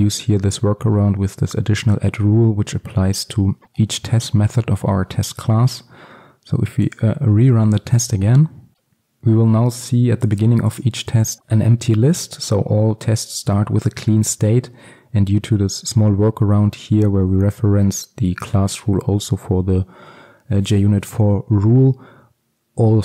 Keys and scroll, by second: 7.0 ctrl+F5.